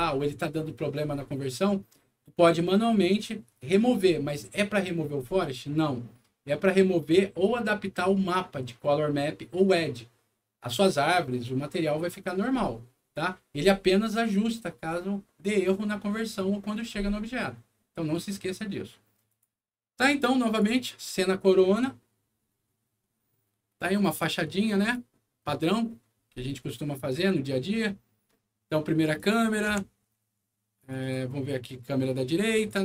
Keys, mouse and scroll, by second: 19.2 click, 20.4 click, 24.6 click, 29.1 click, 29.6 c, 30.7 click, 31.0 click, 32.5 click.